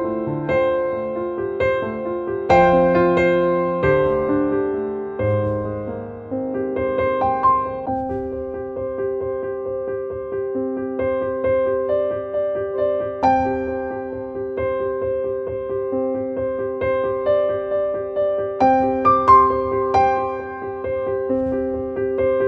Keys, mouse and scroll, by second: 3.4-11.5 drag, 15.6 click, 20.4-21.8 drag.